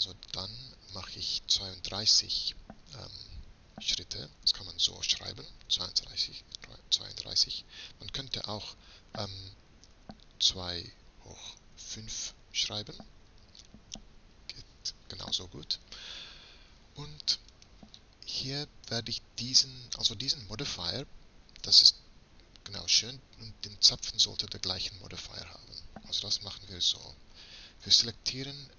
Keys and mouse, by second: 0.4-2.3 drag, 2.4 middle click, 7.7-9.5 drag, 11.0 shift+8, 17.7-19.5 right drag, 20.3 right click, 24.1-25.7 right drag, 25.8-26.4 right drag.